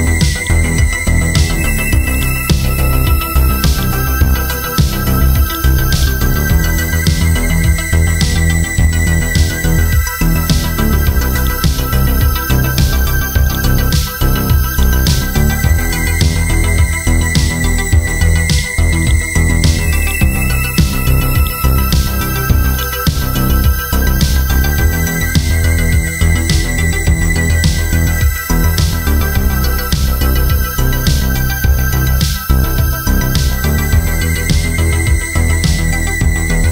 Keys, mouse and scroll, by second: 0.3 shift+click, 2.1-3.4 drag, 3.7 shift+click, 5.5-7.5 drag, 8.9-9.8 typing, 10.4 Left, 11.5 click, 14.2-14.8 scroll down 1, 14.8 click, 15.7-16.6 scroll up 1, 16.7-18.5 scroll down 1, 18.5-25.7 drag.